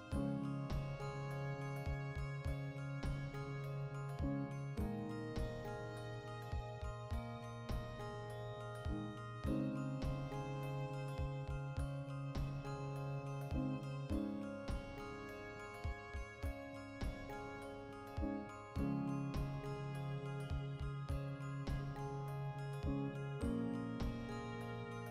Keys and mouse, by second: 1.5 shift+middle click, 2.4 click, 2.7-4.3 middle drag, 4.3 click, 4.9 middle click, 5.5 click, 5.8 middle click, 6.2 click, 6.5-9.6 shift+middle drag, 7.4 ctrl+2, 9.6 click, 10.5-13.2 middle drag, 13.2-16.1 drag, 16.1-23.8 middle drag, 21.2 Tab, 21.7 alt+q, 22.4 alt+q, 23.6 1, 23.8 right click, 24.0-25.1 ctrl+middle drag.